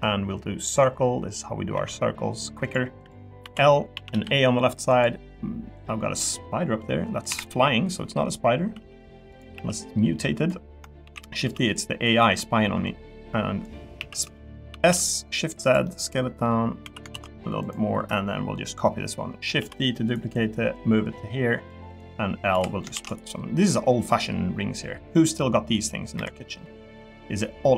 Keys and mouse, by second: 0.7 click, 1.7 e, 3.4 l, 3.9 a, 4.1 g, 5.7 click, 7.3 KP_7, 8.8 g, 9.3 click, 9.5 s, 11.0 shift+d, 11.4 z, 12.8 click, 13.9 s, 14.7 shift+z, 15.6 click, 15.8 middle click, 16.8 s, 17.1 shift+z, 19.6 shift+d, 20.7 click, 21.9 click, 22.5 l, 22.9 shift+d, 24.1 click, 26.2 KP_7, 27.0 g.